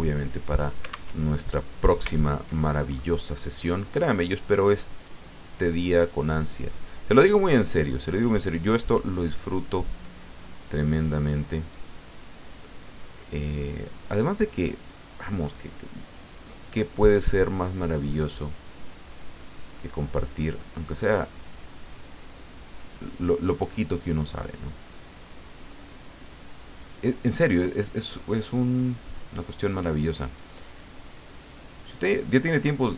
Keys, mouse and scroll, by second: 0.0 alt+Tab, 1.1 alt+Tab, 2.1 ctrl+scroll up 2, 2.6 ctrl+click, 4.2-5.2 drag, 5.3 click, 6.0-7.9 drag, 10.0 click, 10.9 click, 11.7-14.7 drag, 16.4 click, 17.6 click, 19.2-21.1 drag, 22.6 click, 23.4-25.4 drag, 26.4 click, 27.2 click, 27.8-30.4 drag, 30.9 click, 31.7-32.9 drag.